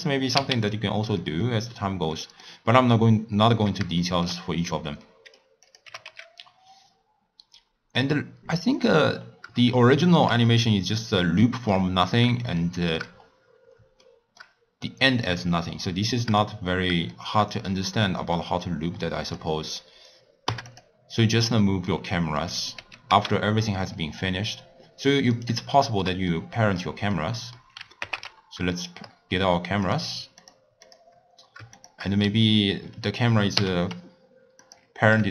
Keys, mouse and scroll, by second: 0.6 x, 1.1 middle click, 1.6-2.1 scroll up 1, 2.1-4.4 middle drag, 4.4 scroll up 1, 4.5-5.0 scroll down 3, 5.0-5.6 middle drag, 5.6 click, 5.8 g, 9.1-9.9 scroll down 3, 9.9-10.4 shift+middle drag, 10.4-10.9 scroll down 3, 10.9-11.4 scroll down 2, 11.4-13.1 shift+middle drag, 13.1-14.0 scroll up 5, 14.0-16.4 shift+middle drag, 16.4-17.1 scroll down 2, 17.1-19.2 shift+middle drag, 19.2-20.8 drag, 21.9-22.7 middle drag, 22.7 g, 25.8-28.0 shift+middle drag, 28.0 ctrl+alt+KP_0, 29.8 click, 30.4 click, 30.8 click, 31.7 shift+click, 33.6 ctrl+p.